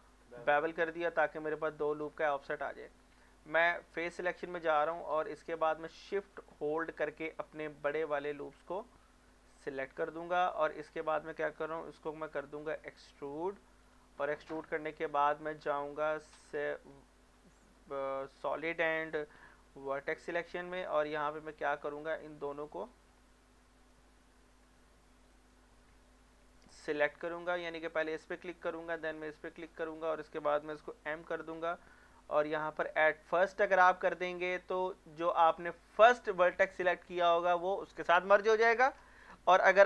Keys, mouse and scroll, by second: 3.2 Tab, 4.0 click, 5.2 shift+click, 9.6 middle click, 10.6 scroll up 1, 12.4 e, 13.9 click, 14.2 middle click, 14.6 scroll up 1, 15.2 shift+middle click, 16.1-18.2 typing, 19.4 Tab, 20.4 shift+middle click, 20.7 scroll up 1, 21.5 click, 22.6 middle click, 23.1 scroll up 1, 25.3 middle click, 26.9-27.7 scroll down 3, 29.5 shift+click, 30.1 scroll down 1, 31.0 m, 33.2 click, 33.7 scroll down 1, 39.0 ctrl+z.